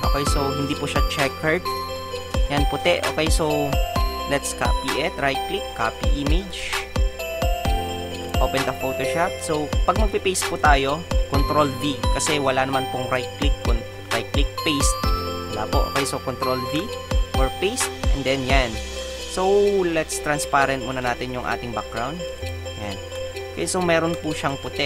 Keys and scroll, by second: 16.7 ctrl+v.